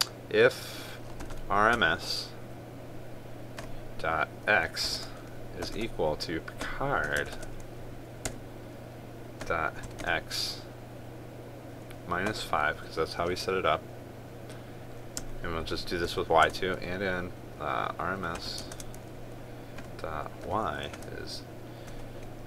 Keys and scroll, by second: 7.9 ctrl+space, 19.3 ctrl+space.